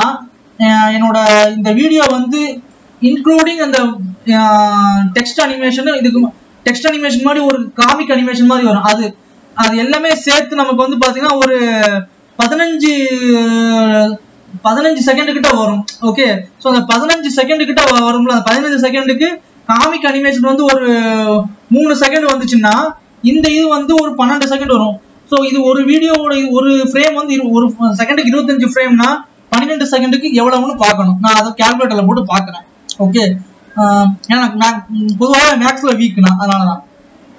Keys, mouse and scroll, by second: 0.0 click, 2.3-37.3 drag.